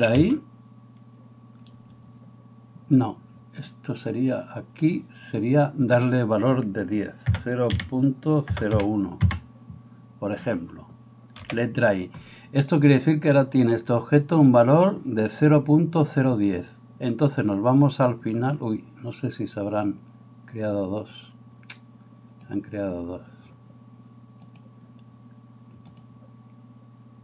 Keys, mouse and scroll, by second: 0.1 i, 3.7-27.2 drag, 11.4 i.